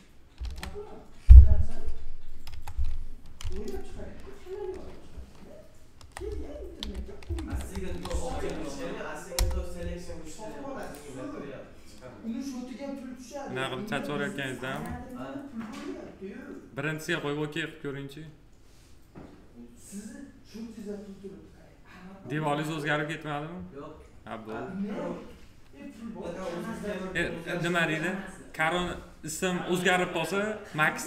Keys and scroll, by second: 0.4 ctrl+v, 2.4 F2, 4.0 Right, 5.1 BackSpace, 6.8 shift+m, 7.2 e, 9.3 Return.